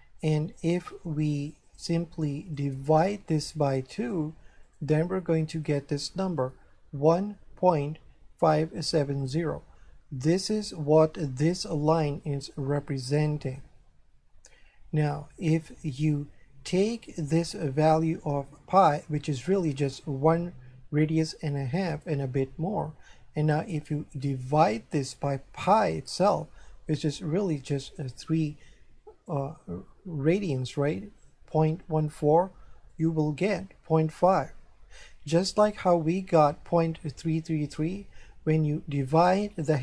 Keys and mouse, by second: 0.6 click, 1.7 click, 10.4 right click, 15.9 click, 24.6 click, 25.7 click, 33.0 click.